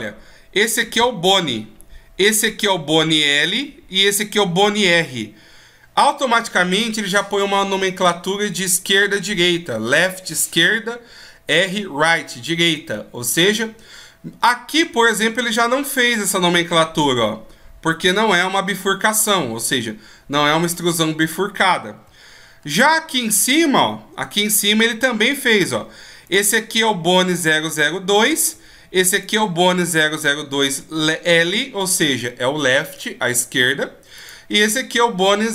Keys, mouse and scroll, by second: 21.8 shift+scroll up 1, 25.9 right click, 33.8 right click.